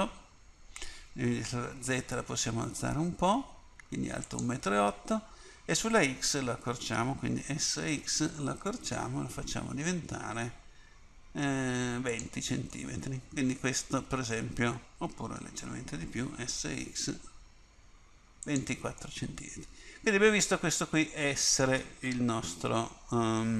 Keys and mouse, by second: 1.5 s, 7.5 s, 15.6 s, 22.4 KP_1.